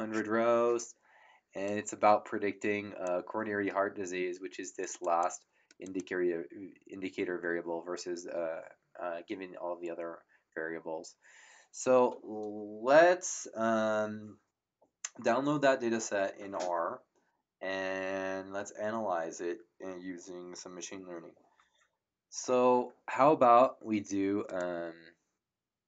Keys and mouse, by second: 1.6 click, 4.8 click, 24.5 right click.